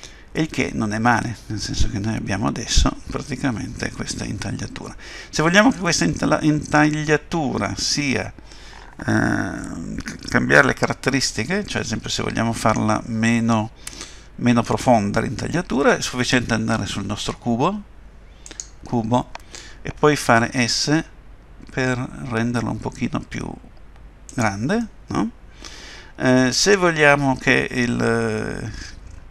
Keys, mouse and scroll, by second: 18.5 click, 20.4 s, 24.8 middle click.